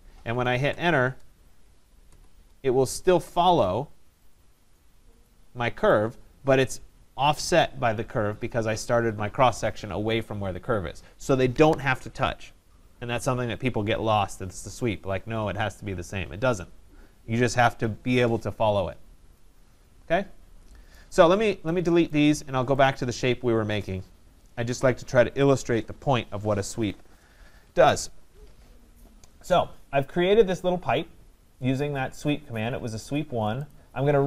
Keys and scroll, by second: 0.7 Return, 24.7 Delete.